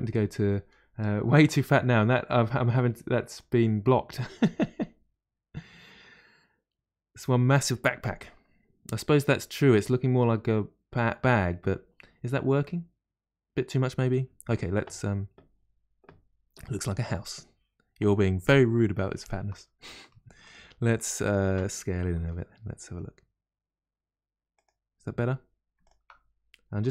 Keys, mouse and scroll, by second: 19.2 click, 20.4 alt+click, 21.2 alt+shift+click, 22.2 s, 25.8 alt+click, 26.8 s.